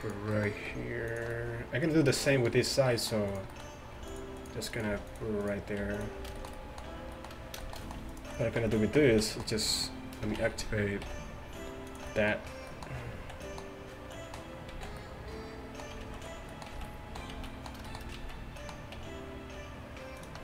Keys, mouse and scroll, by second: 0.7 g, 4.0 g, 4.9 g, 5.9 g, 8.7 z, 9.2 z, 10.4 shift+Tab, 11.1 g, 13.2 z, 14.8 z, 16.1 ctrl+z, 16.8 z, 17.4 z, 18.2 z, 19.0 e.